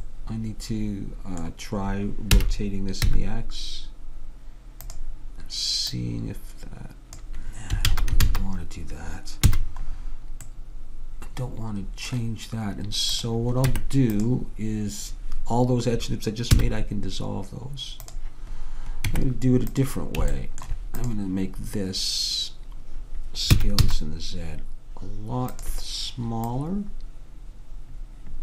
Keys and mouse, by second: 2.5 r, 6.1-7.7 drag, 7.9 ctrl+z, 8.3 ctrl+z, 9.6 a, 13.2-15.0 drag, 13.8 Tab, 16.7 x, 19.2 Tab, 21.1-22.9 drag, 23.7 s, 26.5-28.4 drag.